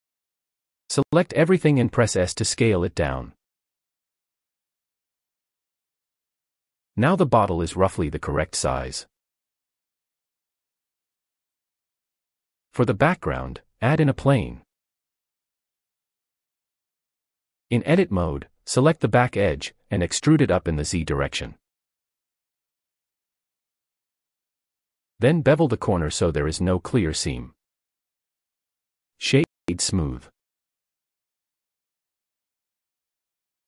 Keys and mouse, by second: 1.5 s, 2.4 click, 3.2 shift+middle drag, 3.7 g, 3.9 z, 5.4 click, 6.1 s, 8.1-9.0 middle drag, 10.9 click, 13.4 shift+a, 15.6 Tab, 18.7 click, 21.5 e, 22.2 z, 24.0 click, 24.9 click, 25.7 ctrl+b, 29.1 Tab, 29.9 click, 30.0 right click, 30.9 middle drag.